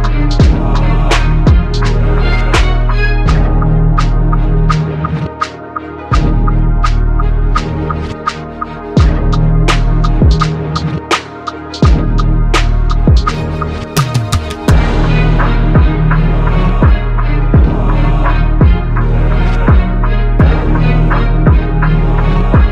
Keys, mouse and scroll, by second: 13.6 e, 17.9 ctrl+r, 19.6 ctrl+r, 19.6 ctrl+r, 21.4 ctrl+z, 21.9 ctrl+r.